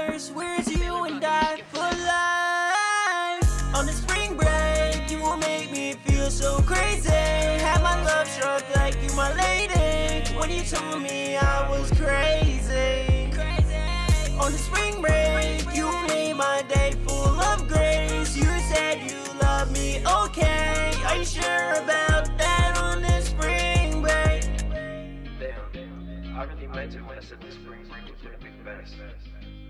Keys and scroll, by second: 3.6-4.5 typing, 4.9 ctrl+Page_Down, 5.1 ctrl+Page_Down, 5.9 ctrl+Page_Down, 7.8 super+s, 29.3 super+s.